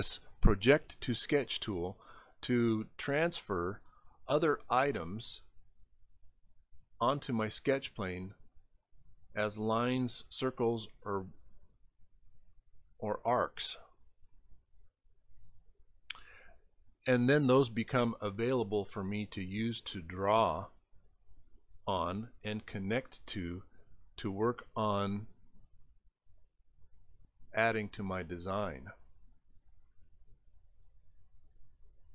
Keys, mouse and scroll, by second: 0.0 click, 3.4 click, 6.3 click, 8.6 click, 10.3 click, 17.3 click, 19.6 click, 21.3 click, 23.1 click, 24.0 click, 26.6 click, 29.5 click.